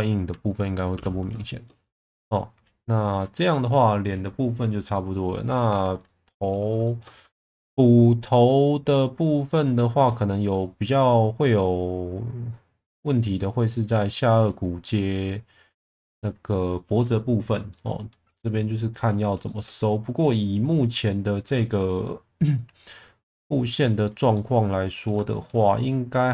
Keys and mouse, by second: 1.0 ctrl+s, 1.5 shift+middle click, 4.9 middle click, 6.0 alt+middle click, 6.8 shift+middle click, 17.7 middle click, 18.7-19.1 middle drag, 19.4 shift+middle drag, 21.1-21.5 middle drag, 21.7 shift+middle drag, 24.3-25.1 middle drag, 25.3 shift+middle click, 25.8-26.3 middle drag.